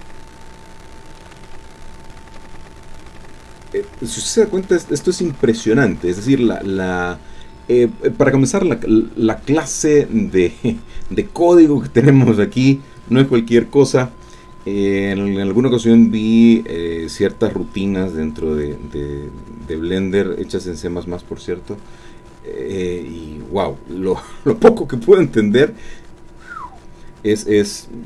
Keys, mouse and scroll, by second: 0.0 shift+click, 0.2 shift+middle click, 1.0-1.5 shift+scroll up 1, 1.5 shift+middle click, 1.7 click, 2.6-2.9 scroll down 1, 3.2-4.8 drag.